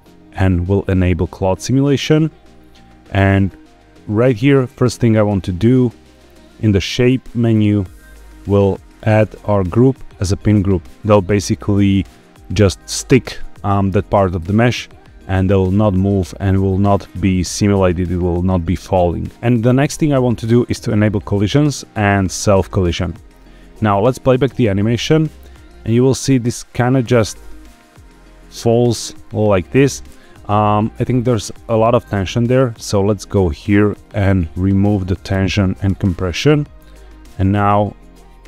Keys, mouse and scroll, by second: 0.0 click, 1.3 click, 3.9-5.4 scroll down 6, 5.4-6.0 scroll up 3, 6.0-6.5 scroll down 4, 7.3 click, 7.7-8.2 scroll down 2, 8.9-10.5 drag, 19.3 ctrl+z, 19.3-19.7 scroll down 6, 20.8 click, 21.1-22.9 scroll down 2, 22.9 click, 24.4 space, 28.9 space, 29.2 click, 31.5-32.3 scroll up 6, 33.8-36.0 drag, 36.8 scroll down 1, 37.1 space.